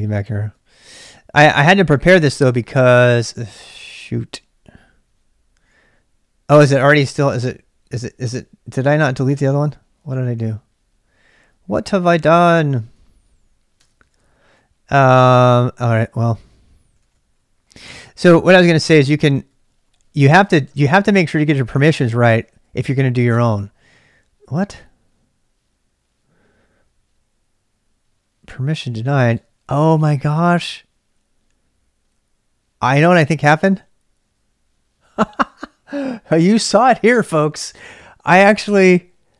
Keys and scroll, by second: 0.0-1.6 typing, 2.0 Return, 3.2 ctrl+[, 3.3 k, 4.6-5.6 typing, 10.1 Return, 12.1 ctrl+a, 12.3 ctrl+a, 13.6-21.8 typing, 21.7 ctrl+[, 23.2 Return, 28.9-30.0 typing, 32.9-33.6 typing.